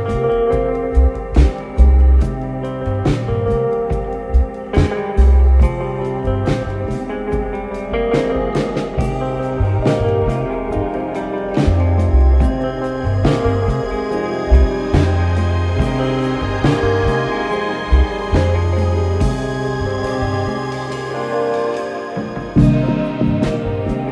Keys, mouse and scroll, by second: 5.8 click, 6.2-6.8 scroll down 1, 6.8 Tab, 7.1 scroll down 1, 7.7 Tab, 8.5 r, 12.7-13.1 scroll up 2, 13.3 s, 14.4-14.7 scroll up 1, 14.9 s, 16.5 click, 17.5 click, 18.7 click, 20.1 click, 21.9 click, 23.2 s, 24.0 scroll down 1.